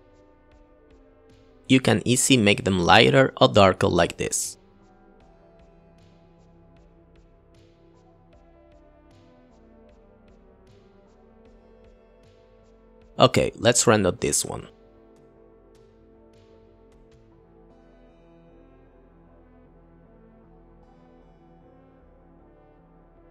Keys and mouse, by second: 0.7 click, 1.1 click, 1.3 click, 1.9 shift+a, 4.1 click, 4.5 click, 7.7 click, 10.1 ctrl+v, 10.2-11.2 typing, 10.5 click, 18.8 click, 20.7-21.1 drag, 20.9 KP_0, 22.7-23.3 drag.